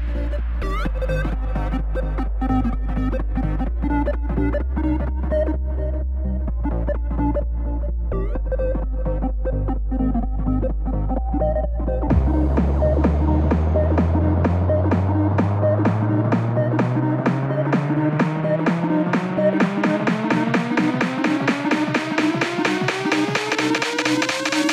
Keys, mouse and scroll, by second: 2.7-9.0 drag, 13.0-18.2 drag, 19.4-22.3 drag, 24.0-24.7 drag.